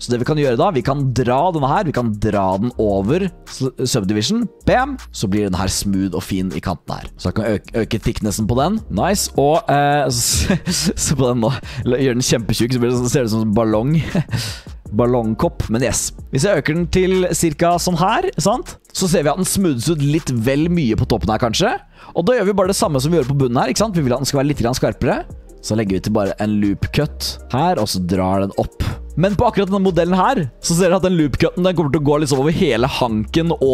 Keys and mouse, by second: 1.3-4.6 drag, 4.9 typing, 5.3-6.0 drag, 6.7 drag, 7.1-18.8 drag, 22.5 middle drag, 23.1 middle drag, 24.0 Tab, 25.5 click, 27.5-29.1 drag, 29.1 ctrl+z, 32.4-33.7 drag.